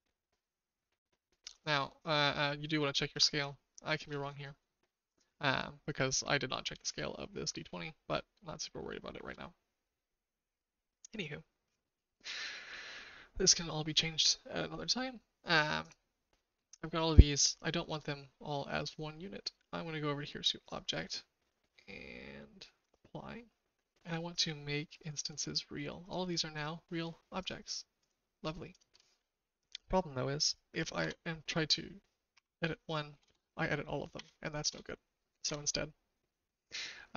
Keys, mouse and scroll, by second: 3.4 shift+middle click, 4.6 shift+middle click, 8.6 shift+click, 20.6-25.4 drag, 26.0 click, 26.5 click, 30.9 Tab, 32.3-34.1 typing, 34.6 KP_Enter, 35.4 Tab.